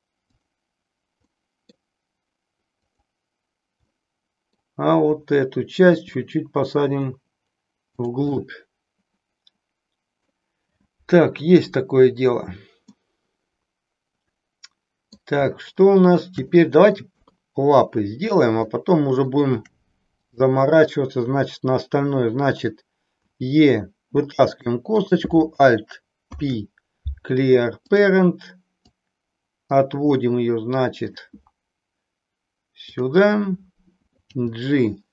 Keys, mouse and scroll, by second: 0.2 click, 1.2 middle click, 2.9 click, 3.9 middle click, 5.9 g, 8.1 click, 8.4-10.4 middle drag, 13.0-15.3 middle drag, 15.6 shift+middle click, 16.5 middle click, 17.3 KP_3, 18.7 shift+middle click, 20.1 click, 23.2 e, 25.0 click, 26.1 alt+p, 29.0-31.2 drag, 34.2 g.